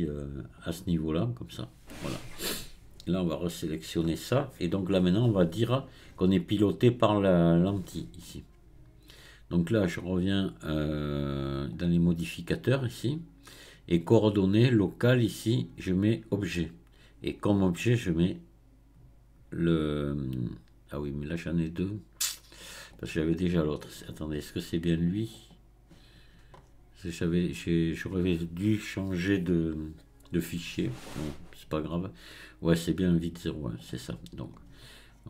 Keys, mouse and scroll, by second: 3.3 click, 4.1 scroll up 1, 11.7 click, 15.1-20.9 drag, 25.4 click, 26.6-27.2 scroll down 1, 27.2-29.9 scroll down 3, 29.9-30.4 scroll down 1, 33.8 click, 34.4 click, 35.1 scroll down 4.